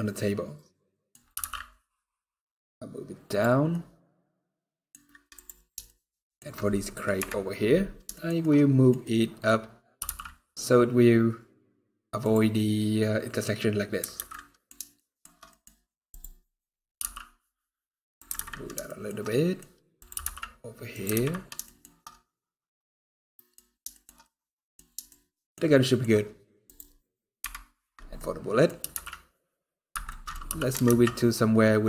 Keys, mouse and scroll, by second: 1.0 g, 3.3 scroll down 2, 3.4 middle click, 4.6 scroll up 3, 5.1 click, 5.6 shift+middle click, 7.5 scroll up 2, 7.8 shift+middle click, 8.7 middle click, 9.3-9.7 scroll up 1, 9.7 g, 12.7 scroll down 2, 13.7-14.0 scroll down 2, 14.0 alt+a, 14.0 middle click, 14.7 shift+middle click, 15.2 middle click, 15.4 scroll up 2, 15.8 click, 16.1 scroll up 3, 16.7 g, 18.2 alt+a, 18.2 scroll down 4, 18.6 shift+middle click, 19.1 middle click, 19.4-19.7 scroll up 2, 19.7 click, 20.0 g, 21.0 alt+a, 21.0 scroll down 2, 21.4 shift+middle click, 21.7 middle click, 23.6 shift+middle click, 23.9 middle click, 24.8 shift+middle click, 25.5 shift+middle click, 25.8 scroll up 1, 26.4 click, 27.1 KP_Decimal, 27.9 middle click, 28.5 g, 29.8 middle click, 30.1 scroll down 1.